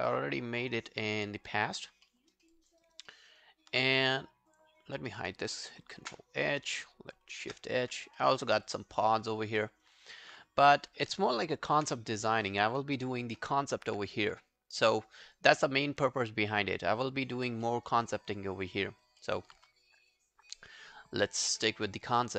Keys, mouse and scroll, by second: 1.8 alt+right click, 2.1 alt+middle click, 2.3 alt+right click, 2.5 alt+click, 2.8 alt+right click, 3.1 alt+middle click, 3.3 alt+right click, 4.9 double click, 7.3 shift+h, 8.2 alt+middle click, 8.5 alt+right click, 8.7 alt+click, 9.8 alt+middle click, 9.9 alt+right click, 10.1 alt+click, 11.6 ctrl+h, 13.1 shift+h, 14.6 scroll down 1, 14.8 alt+middle click, 15.1 alt+right click, 15.4 alt+click, 15.7 alt+middle click, 15.9 alt+right click, 16.2 alt+click, 17.7 alt+middle click, 17.9 alt+right click, 18.1 alt+click, 19.2 alt+middle click.